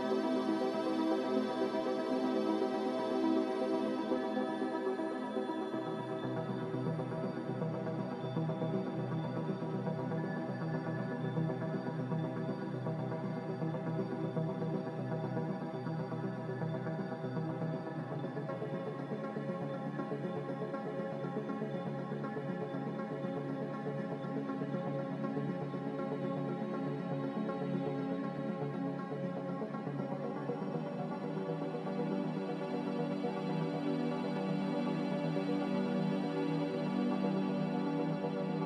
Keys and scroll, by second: 1.9 Delete, 9.4 5, 9.6 Return, 11.5 g, 13.6 z, 29.0 g, 31.7 z.